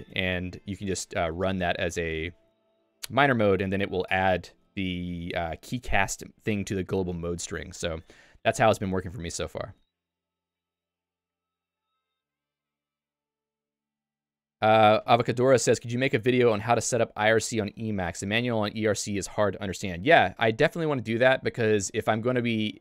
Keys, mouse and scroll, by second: 0.1 Escape, 0.3-1.5 typing, 2.5 Escape, 3.7 k, 4.3 j, 5.4-6.5 l, 8.8 Escape.